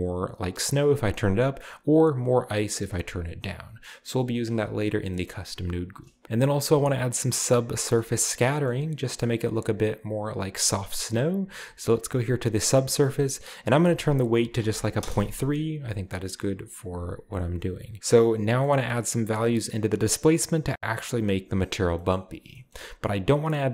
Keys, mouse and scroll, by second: 2.8 shift+middle click, 4.7-5.3 scroll down 2, 5.1 middle click, 6.7-7.8 middle drag, 8.0 middle click, 8.1-9.6 scroll up 2, 8.7-9.6 middle drag, 9.6 click, 12.6-13.5 drag, 13.6-14.6 drag, 15.0 typing, 15.2 Return, 18.7-21.9 middle drag, 22.0-23.4 scroll up 1, 23.4 click.